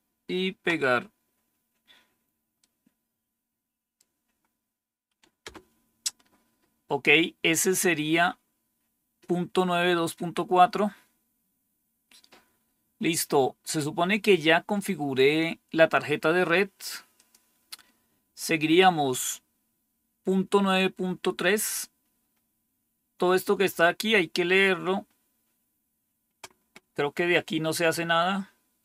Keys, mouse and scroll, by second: 2.5-3.8 right drag, 5.3 Return, 9.8-11.3 scroll down 2, 11.3-12.7 scroll down 1, 12.7-14.4 scroll down 1, 17.0 click, 21.6 scroll down 2, 22.2 scroll down 2, 22.9-23.6 scroll down 2, 23.6 scroll down 1, 24.3 scroll down 2, 24.9 scroll down 2, 28.6-28.8 scroll down 3.